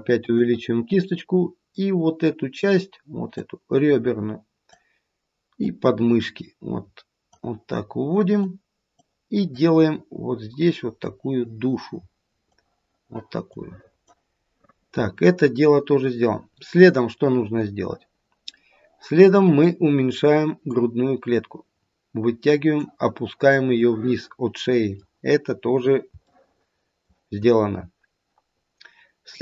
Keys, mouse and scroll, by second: 3.4 click, 5.6 click, 8.3 click, 9.5 click, 13.4 click, 14.5 middle click, 20.7 click, 23.8 middle click, 24.0 middle click, 24.5 middle click, 25.5-26.0 scroll down 1, 26.2 shift+middle click, 26.6 shift+middle click, 27.2 shift+middle click, 28.5-29.4 scroll up 1.